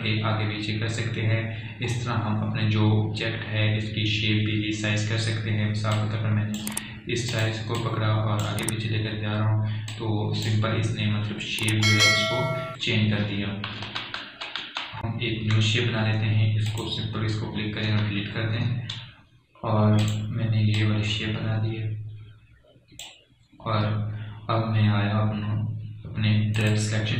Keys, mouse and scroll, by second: 1.6 scroll up 1, 3.2-4.6 scroll down 1, 7.3-13.1 drag, 13.1-13.9 alt+scroll up 1, 15.2 ctrl+z, 18.1 click, 19.3 Delete, 21.5-27.0 drag.